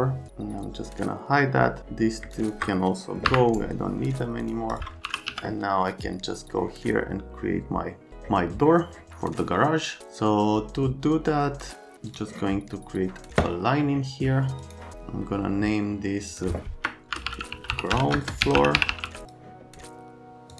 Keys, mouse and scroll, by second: 0.8 click, 2.3 click, 3.2 Delete, 3.6 right click, 4.1 click, 4.4 click, 4.7 click, 5.1 r, 14.6 right click, 16.9-19.5 typing.